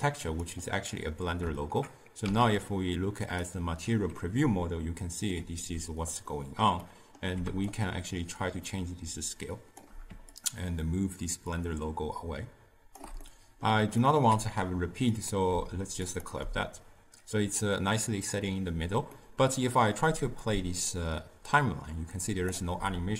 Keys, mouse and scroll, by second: 1.7 KP_0, 3.6 z, 4.3-7.9 ctrl+middle drag, 7.9-19.2 shift+drag, 19.2-20.6 middle drag, 20.6-23.1 drag.